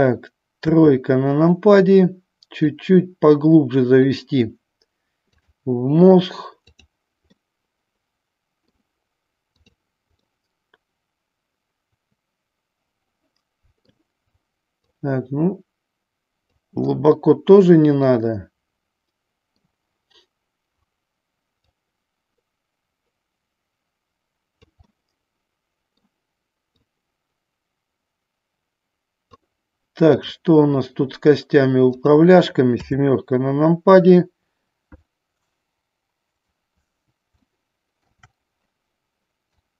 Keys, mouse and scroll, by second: 0.9 KP_3, 2.9-4.2 drag, 5.5 click, 7.5-9.0 middle drag, 9.8 click, 10.3-14.2 middle drag, 15.0-16.7 drag, 17.0-19.8 middle drag, 21.9-24.9 drag, 25.0-26.3 middle drag, 26.9-29.5 drag, 32.1-34.7 drag, 34.7 KP_7, 37.6 shift+middle click, 39.6-39.7 drag.